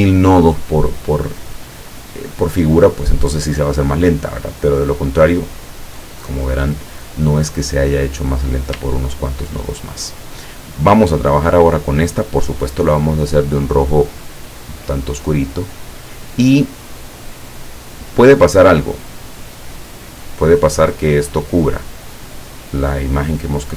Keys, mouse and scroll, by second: 8.0 click, 8.9 ctrl+scroll down 2, 10.3-11.8 drag, 14.1 click, 14.9-17.1 drag, 17.9 click, 19.9-23.7 drag.